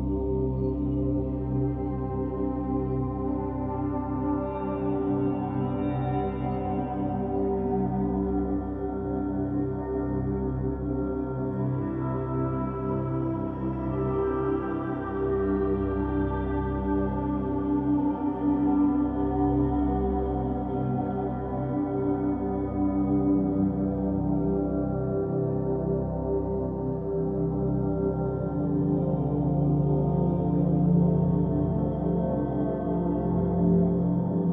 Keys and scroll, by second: 6.5-7.5 typing, 11.6-12.5 typing, 18.7 BackSpace, 26.2-29.4 typing.